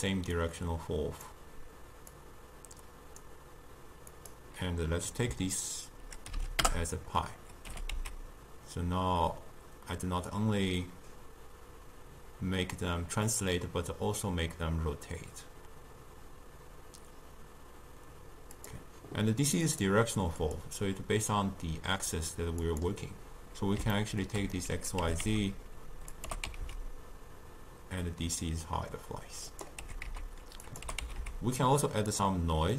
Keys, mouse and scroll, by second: 0.5-7.2 drag, 7.8 g, 19.7 click, 20.5-23.7 drag, 24.0-25.1 ctrl+middle drag, 25.1 r, 26.4 g, 29.9 r, 31.0 g.